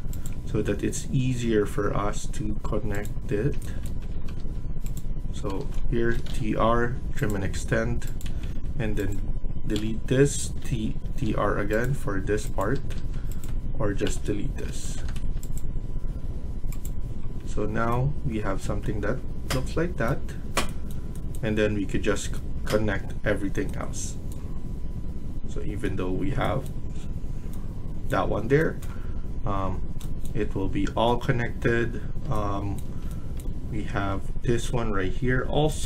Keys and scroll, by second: 3.2 Escape, 3.8 Escape, 4.0 Escape, 4.3 Escape, 5.3 Escape, 5.4 Escape, 5.8-6.7 typing, 8.2 Escape, 8.4 Escape, 9.6 Delete, 10.4 Delete, 11.0 Delete, 12.6 Escape, 12.9 Escape, 14.0 Delete, 14.6 Escape, 14.8 Escape, 15.0 Escape, 17.3 Escape, 21.0 Escape.